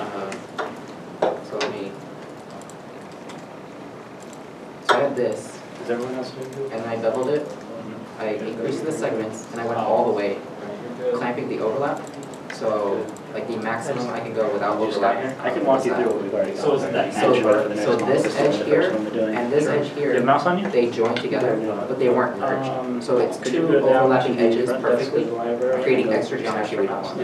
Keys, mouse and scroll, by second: 0.6 alt+shift+click, 1.6 alt+click, 5.9 alt+click, 6.7 ctrl+b, 17.8 ctrl+b, 17.8 shift+middle click, 18.0 scroll up 1, 18.7 shift+middle click.